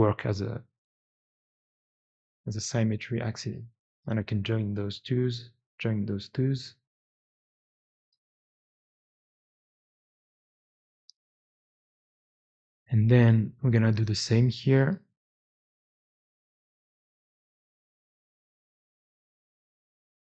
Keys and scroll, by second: 1.9 2, 4.8 j, 6.4 j, 10.6-11.6 typing, 14.4 Tab, 14.6 Tab, 14.7 Tab, 15.8 Tab, 15.9 Tab, 16.0 Tab, 16.2 Tab, 16.3 Tab, 16.4 Tab, 18.6 1, 20.0 2.